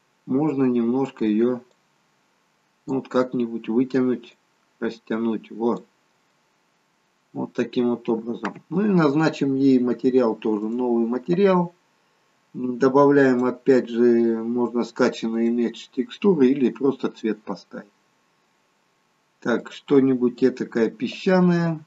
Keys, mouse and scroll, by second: 1.7 click, 4.3 click, 6.4 middle click, 8.1 scroll down 1, 10.7 click, 13.3 click, 21.3 click.